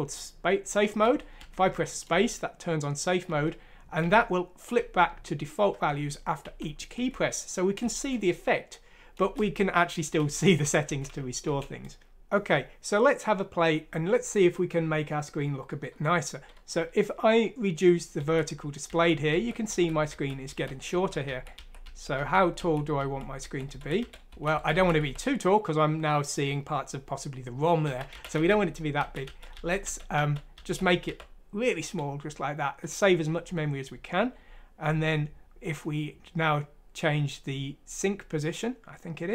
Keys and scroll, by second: 1.0-2.0 typing, 3.2-7.8 typing, 9.2-12.5 typing, 18.0-25.3 typing, 27.9-31.1 typing.